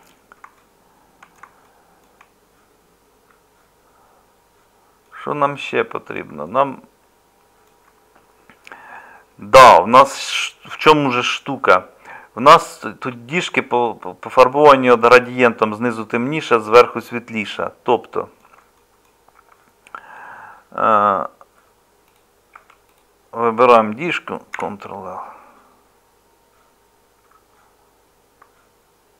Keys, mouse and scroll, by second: 19.4 Tab, 22.4 middle click, 22.5 Tab, 24.5 ctrl+l.